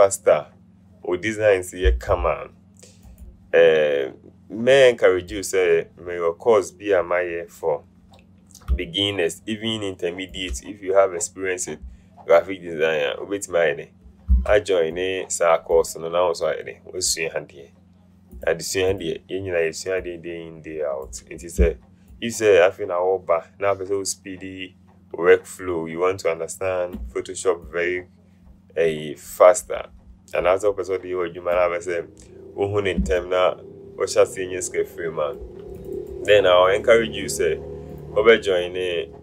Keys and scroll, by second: 14.6 v.